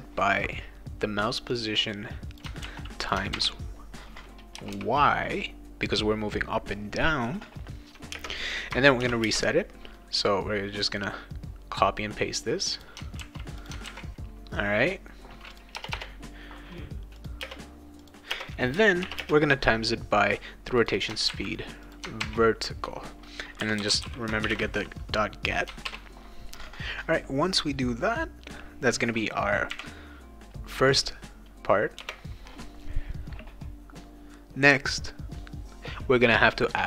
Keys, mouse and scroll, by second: 1.5 click, 2.6 ctrl+c, 3.0 click, 3.3 ctrl+v, 4.5 BackSpace, 4.7 y, 8.1 space, 9.0 shift+8, 9.2 space, 10.8-12.8 drag, 13.2 ctrl+c, 13.6 click, 13.8 ctrl+v, 15.5 click, 15.8 BackSpace, 17.2 click, 17.4 space, 18.0 click, 18.3 space, 19.0 shift+8, 19.2 space, 20.8 click, 20.9 click, 21.3 ctrl+c, 21.9 click, 22.2 ctrl+v, 23.3-25.1 typing, 25.8 ctrl+s, 29.7 ,, 32.0 Return.